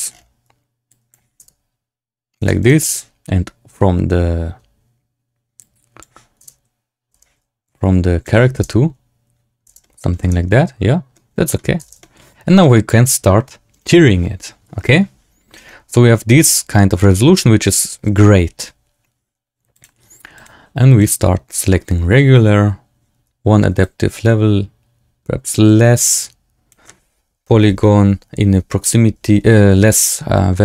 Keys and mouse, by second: 0.9 click, 1.3 space, 2.3 space, 2.5 click, 5.5 click, 6.3 space, 7.0 space, 7.8 shift+click, 8.5 space, 9.6 space, 9.7 drag, 10.1 space, 11.1-11.6 drag, 11.7 space, 11.9 shift+drag, 12.5-13.2 drag, 13.6 click, 15.5 Tab, 16.9 shift+click, 18.6 Tab, 19.6 click, 20.3-20.9 drag, 23.7-26.6 shift+drag.